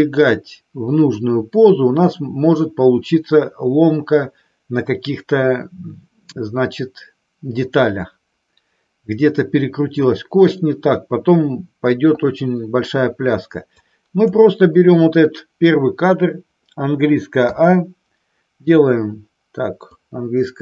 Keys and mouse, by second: 13.7-14.3 drag, 17.4 a, 19.8-20.6 drag.